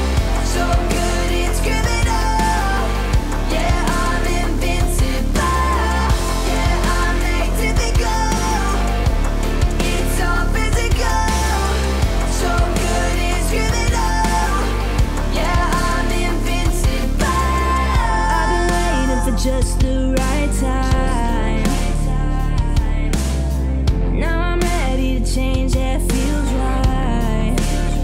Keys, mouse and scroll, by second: 3.9 Delete, 4.7-5.6 middle drag, 8.0 scroll up 1, 8.8-9.3 middle drag, 10.7-15.0 drag, 23.2 ctrl+z, 24.1-26.6 drag.